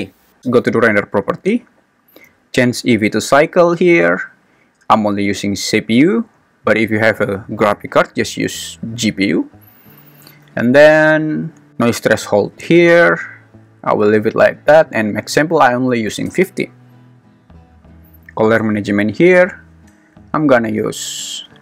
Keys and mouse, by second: 2.5-3.5 drag, 6.6-9.4 drag, 15.4 click, 18.9 click, 21.2 click.